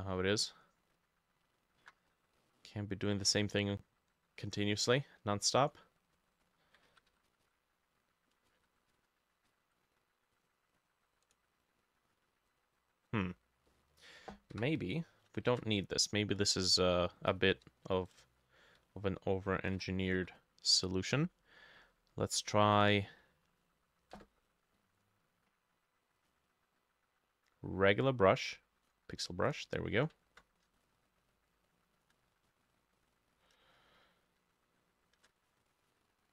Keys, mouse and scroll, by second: 2.1 scroll, 2.2 scroll down 1, 2.4 middle click, 5.5 scroll down 1, 5.7 middle click, 6.2 scroll down 1, 6.5-6.8 scroll up 1, 6.9 ctrl+z, 7.1 ctrl+z, 7.3 ctrl+z, 7.5 ctrl+z, 8.5 ctrl+shift+z, 8.9 ctrl+shift+z, 9.5 ctrl+z, 11.3 right click, 13.7 middle click, 14.6 Delete, 15.5 ctrl+shift+a, 17.7-20.4 drag, 17.7 v, 18.2 v, 18.8-19.9 shift+middle drag, 19.8 v, 20.0 ctrl+middle click, 20.1 ctrl+z, 24.2 Escape, 30.2 ctrl+middle click, 30.6-36.3 ctrl+shift+drag, 30.7-32.4 shift+middle drag, 32.5-33.5 v, 33.6-35.8 shift+middle drag, 35.5 ctrl+z, 35.9 e.